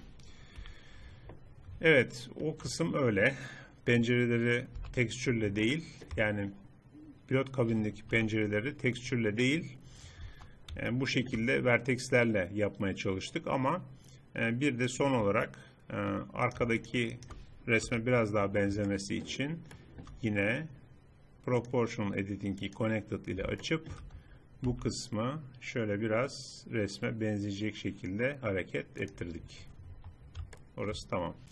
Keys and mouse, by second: 0.6 KP_3, 4.8 n, 5.4 click, 8.2 KP_3, 10.3 Tab, 11.2 middle click, 14.9-16.5 drag, 16.5 middle click, 16.9-17.9 middle drag, 17.9 KP_3, 21.6-23.6 drag, 23.6 middle click, 24.7 g, 29.3 middle click, 30.0 Tab, 30.2 middle click.